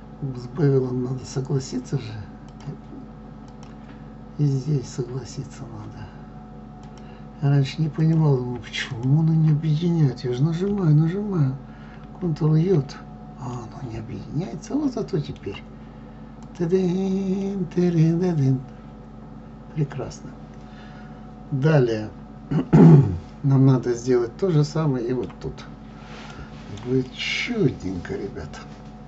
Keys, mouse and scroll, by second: 2.5 click, 9.0 shift+click, 12.0 ctrl+j, 13.6-16.4 middle drag, 16.4 click, 17.4-20.4 middle drag, 27.1-29.0 middle drag.